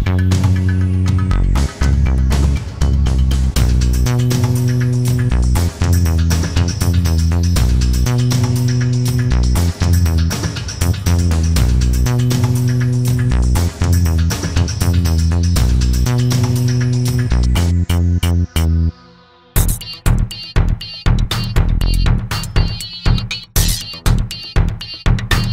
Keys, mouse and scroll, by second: 0.2 F1, 0.7 click, 2.4 click, 3.2 click, 3.9 F1, 5.4 click, 7.4 click, 9.2 click, 10.0 click, 13.4 click, 17.4 Caps_Lock, 18.3 Caps_Lock, 18.7 click, 22.3 shift+click, 22.9 shift+click, 23.6 shift+click, 24.3 shift+click, 25.3 shift+click.